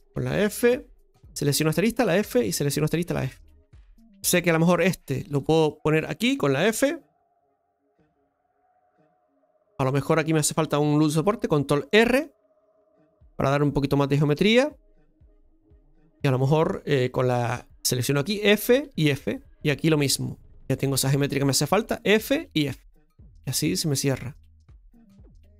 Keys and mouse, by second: 0.6 f, 1.6 right click, 2.0 f, 2.7 right click, 2.9 f, 4.8 right click, 5.7 shift+right click, 7.8 f, 15.2 right click, 16.0 shift+right click, 17.9 right click, 18.2 f, 20.5 right click, 20.5 f, 21.8 f, 24.7 f.